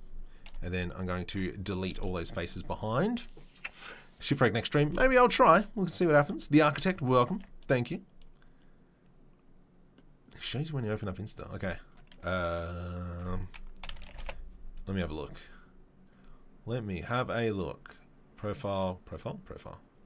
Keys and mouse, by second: 2.5 Delete, 7.3 Tab.